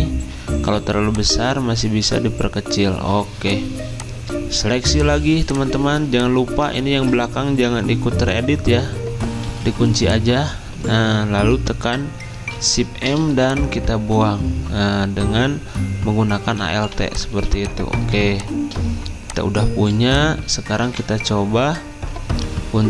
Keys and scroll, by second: 6.9 ctrl+z, 9.4 ctrl+2, 12.3 m, 19.9 v.